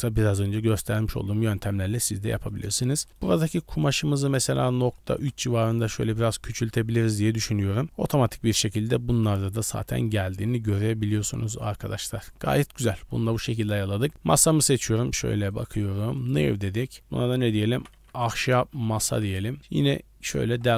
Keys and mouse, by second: 0.6-1.0 middle drag, 1.8 middle click, 3.0 middle click, 3.8-5.2 middle drag, 6.0 middle click, 6.6 click, 7.8 middle click, 9.2-9.6 middle drag, 9.9 shift+middle drag, 10.9 shift+middle drag, 11.2 middle drag, 13.2 shift+middle drag, 13.5 middle drag, 14.4 middle drag, 14.9 g, 16.2 click, 16.8-19.3 drag, 20.4 KP_Decimal.